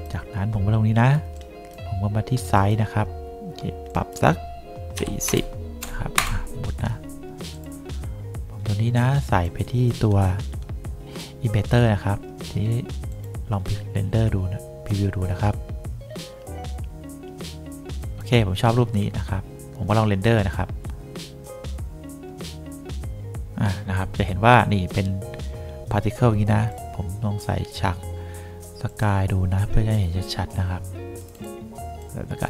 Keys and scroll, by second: 5.0 4, 5.4 0, 6.3 Return.